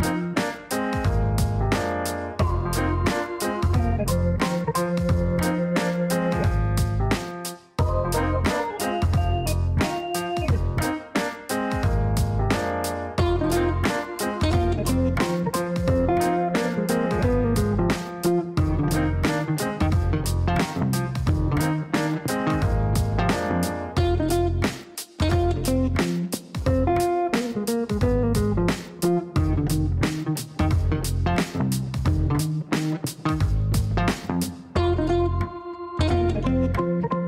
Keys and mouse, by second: 0.3 click, 1.6 click, 2.4 click, 3.6 space, 4.4 click, 5.3 click, 5.8 space, 6.6 middle click, 8.1 click, 8.5 space, 9.5 click, 10.1 click, 10.3 space, 11.1 click, 11.7 middle click, 23.8 middle click, 25.3 click, 26.0 click, 28.1 click.